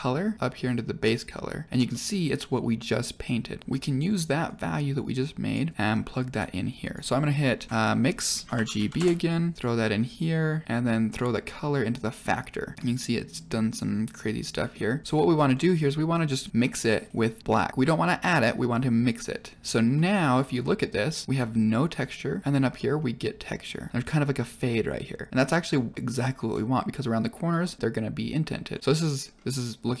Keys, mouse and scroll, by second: 1.8-2.2 middle drag, 3.6-4.1 drag, 3.6 middle click, 4.4-5.6 drag, 5.7 click, 6.7 click, 7.7 click, 7.7 shift+a, 10.1 click, 11.1-12.2 drag, 12.7 middle click, 14.5 middle click, 15.0 click, 15.4 middle click, 16.2 click, 17.5 click, 19.9-20.3 middle drag, 20.5-21.1 scroll up 2, 21.9-22.4 middle drag, 22.7 middle drag, 23.9 middle click, 25.6-26.0 middle drag, 27.5 middle drag, 28.6 middle click, 29.0-30.0 scroll down 4.